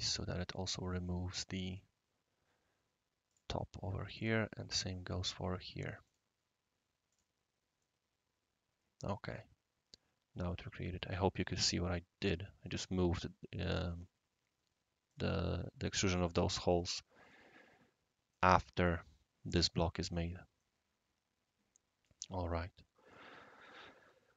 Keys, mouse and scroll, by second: 0.1-1.6 right drag, 1.6 click, 3.3 click, 3.6-4.3 drag, 5.2 click, 6.0 click, 7.1 click, 7.8-11.1 right drag, 15.1 click, 15.8 click, 16.7 click, 17.2 click, 18.3-18.9 right drag, 20.0-20.3 middle drag, 20.6-22.1 right drag, 22.5 right click, 23.4 scroll up 1, 24.1-24.3 scroll up 1.